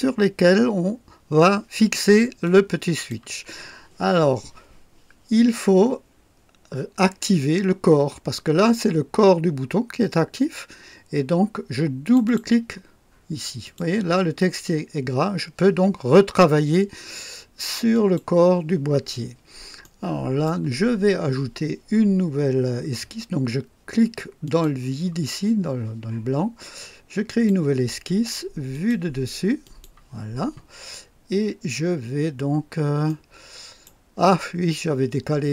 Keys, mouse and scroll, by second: 2.4-3.3 drag, 12.0 click, 13.6 click, 17.9 click, 19.1-19.5 scroll up 1, 19.8-20.6 right drag, 24.4 click, 27.2 click, 28.7 click, 29.6 click, 31.0-31.5 scroll up 2, 31.9-32.2 scroll down 1, 33.0-34.0 right drag.